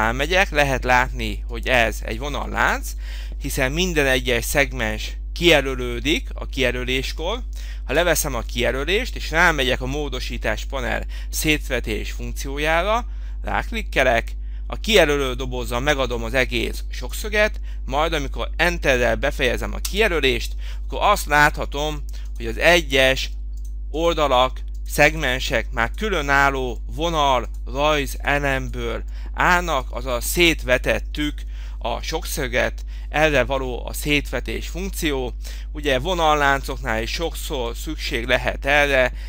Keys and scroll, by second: 8.0 Escape, 20.0 Return, 23.1 Escape.